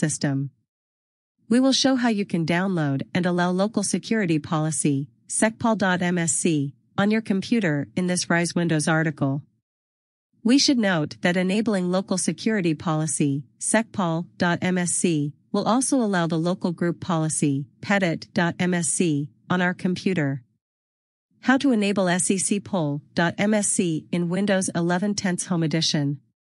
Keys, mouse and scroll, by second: 11.6 right click, 19.8 click.